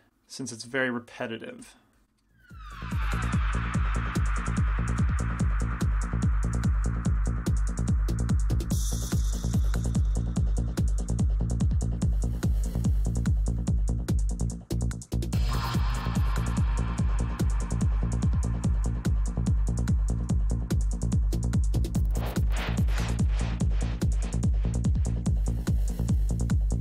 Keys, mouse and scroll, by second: 0.0 f, 0.8 f, 1.7 f, 2.8-4.6 drag, 3.3 f, 4.6 middle click, 4.9 f, 5.0-6.2 drag, 5.2 f, 6.4 f, 6.8 click, 6.8 f, 8.7 f, 8.9 click, 9.3-12.4 drag, 9.4 f, 10.0 f, 10.5 f, 11.9 right click, 12.2 f, 12.4 middle click, 12.8 f, 13.0-15.7 drag, 13.0 right click, 13.5 f, 15.1 middle click, 15.7 middle click, 15.7 g, 15.9 f, 16.1-17.5 drag, 16.9 f, 18.4-19.6 drag, 18.9 f, 19.8-20.9 drag, 20.2 right click, 20.4 middle click, 20.9 f, 21.2-25.0 drag, 21.6-24.0 right drag, 21.9 f, 24.5 right click, 25.0 middle click, 25.4-26.8 drag, 25.4 middle click, 26.1 middle click.